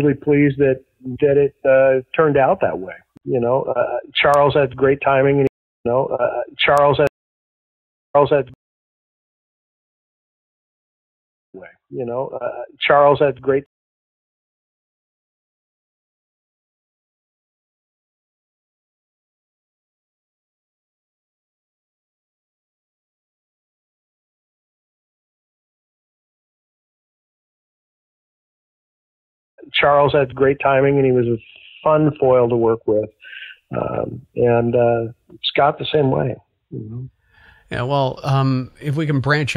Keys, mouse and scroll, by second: 0.3 scroll down 1, 1.2 click, 1.7-2.7 drag, 3.1 Delete, 4.0 click, 5.0 click, 5.4 space, 5.7 click, 5.7 space, 7.0 space, 7.1 click, 7.4 click, 8.1 space, 8.5 space, 8.9 click, 9.7 shift+click, 11.4 click, 11.4 space, 13.6 space, 14.6 click, 14.8 click, 16.2 ctrl+s, 16.8 space, 29.4 click, 29.5 space, 30.8-32.2 drag, 32.5 click, 33.4 click, 34.5 click, 36.1 click, 36.7 click, 38.6-39.5 drag.